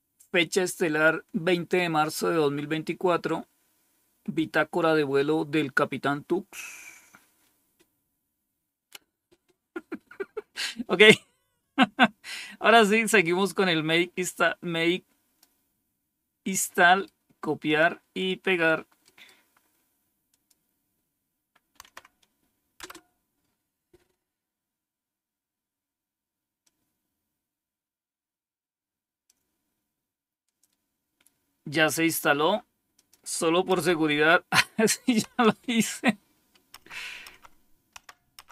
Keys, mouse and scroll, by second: 13.3-15.3 drag, 16.8 right click, 17.6 click, 19.0 right click, 20.2 click, 21.7 Right, 22.7 Return, 26.5-29.2 drag, 32.9 click, 33.6 Up, 35.1 typing, 36.7-38.5 typing.